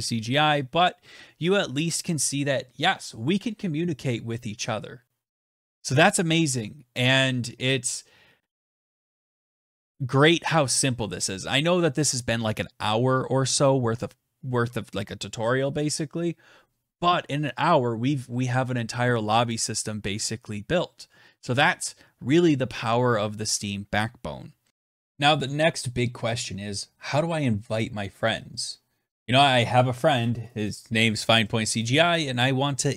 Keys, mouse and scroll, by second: 25.0 click.